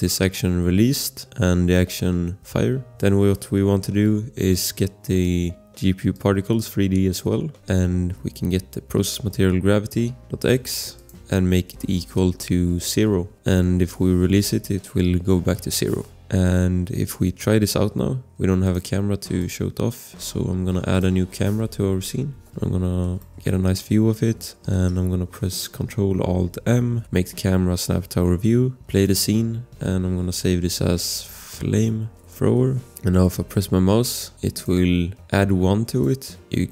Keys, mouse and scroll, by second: 0.3 v, 2.7 click, 2.9 Return, 2.9 click, 6.1 click, 9.1 click, 10.7 ctrl+c, 10.9 click, 11.3 ctrl+v, 11.6 space, 12.5 shift+0, 12.7 space, 13.0 0, 16.0 Return, 18.6 click, 21.1-22.0 typing, 22.3 scroll, 22.3 Return, 22.4 click, 23.0 click, 23.6 scroll, 23.7 click, 26.6 ctrl+alt+shift+m, 30.6-32.8 typing, 32.8 click.